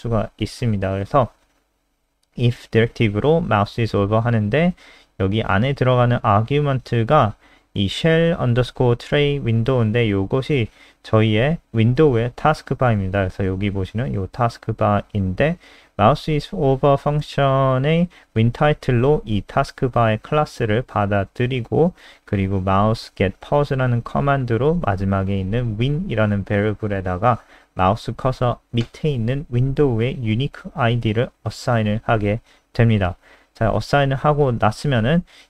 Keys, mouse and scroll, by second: 0.4 click, 1.7 ctrl+z, 2.0 click, 2.6 click, 17.6 click, 18.1 click, 18.3 click, 20.4 click, 22.0-23.0 scroll down 1, 24.2 click.